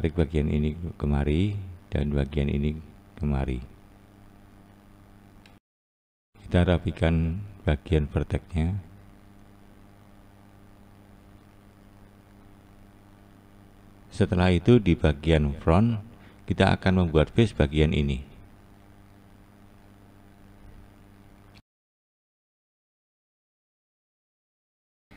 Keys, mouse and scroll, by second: 1.8 click, 2.5 click, 3.3 click, 4.1 click, 6.2 click, 6.6 click, 8.6 click, 9.1 click, 10.4 click, 11.1 click, 11.7 click, 12.2 click, 12.8 click, 14.7-15.4 scroll down 2, 15.4-19.2 scroll up 1.